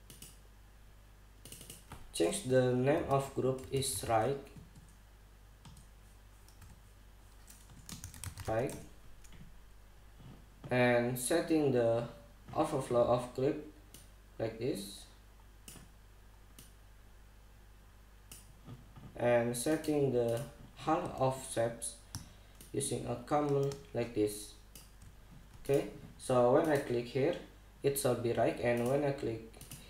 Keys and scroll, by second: 3.6-5.2 typing, 7.2 ', 8.4-9.6 typing.